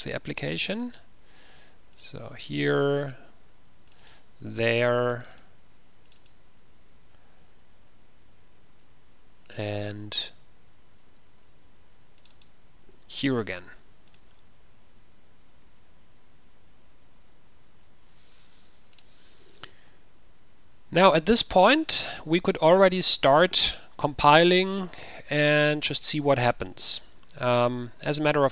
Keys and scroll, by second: 7.1 ctrl+v, 13.4 ctrl+v.